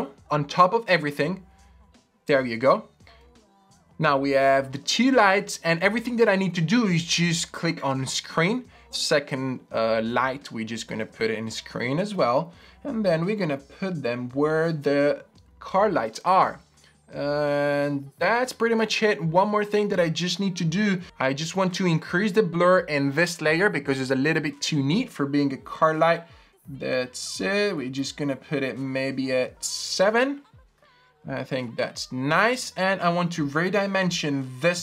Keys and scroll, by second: 3.2 Return, 4.5 Return, 12.1 v, 33.3 super+t.